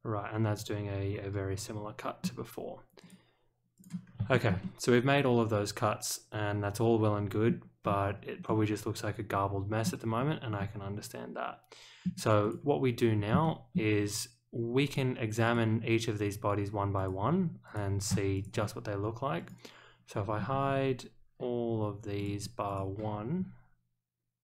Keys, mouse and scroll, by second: 3.0 click, 3.7 click, 4.0 scroll up 1, 4.3 shift+middle click, 4.6-7.4 middle drag, 7.8-8.4 scroll down 2, 8.4-9.8 middle drag, 10.0-10.5 scroll up 1, 10.5-12.0 middle drag, 12.4 click, 13.4-13.7 shift+middle drag, 14.8 click, 15.4 click, 16.9 click, 17.6 click, 18.3 shift+click, 19.3 click, 22.1 shift+click, 22.6 shift+click.